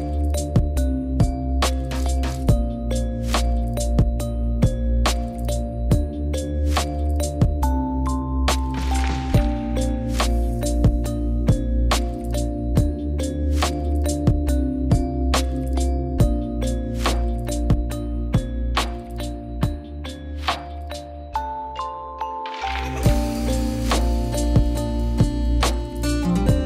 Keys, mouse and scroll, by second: 0.7-1.7 middle drag, 2.4 middle click, 3.3 middle click, 4.1 middle click, 5.6 middle click, 6.2 middle click, 7.0-8.4 middle drag, 9.3 drag, 9.9 drag, 10.7 drag, 11.1 click, 12.4 click, 13.1-15.3 drag, 26.4-26.6 middle drag.